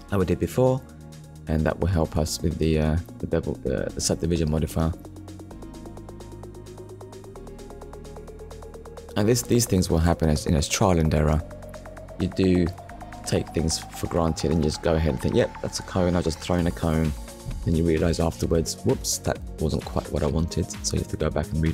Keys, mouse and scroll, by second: 0.6 click, 4.1 click, 4.8 click, 5.9 middle click, 7.6 shift+click, 8.9 shift+click, 9.6 click, 10.6 click, 12.4 ctrl+KP_Add, 13.7 shift+middle click, 14.9 Delete, 16.9 click, 17.8 middle click, 19.9 click, 21.1 alt+click.